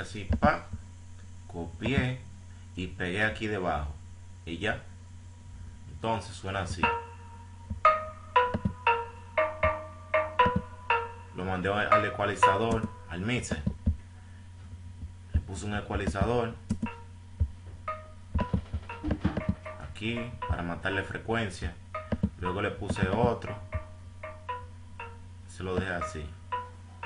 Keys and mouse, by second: 9.0 F1, 14.6-20.2 drag, 21.3 click, 22.4 click.